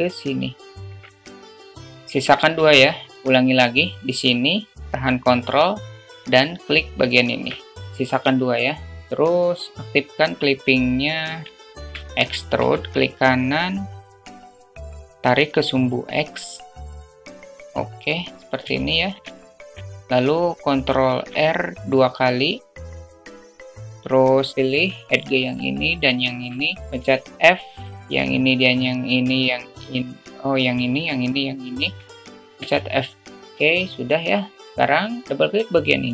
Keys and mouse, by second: 1.1 ctrl+click, 2.2 alt+middle click, 7.4 ctrl+click, 9.1 alt+middle click, 11.3 click, 12.2 alt+shift+middle click, 13.0 e, 15.6-18.2 drag, 19.2 alt+shift+middle click, 19.8 alt+middle click, 21.5 ctrl+r, 25.0 shift+middle click, 27.5 f, 28.4 click, 28.9 click, 31.0 click, 31.5 shift+click, 32.0 shift+click, 33.7 middle click, 34.4 shift+middle click, 36.0 click.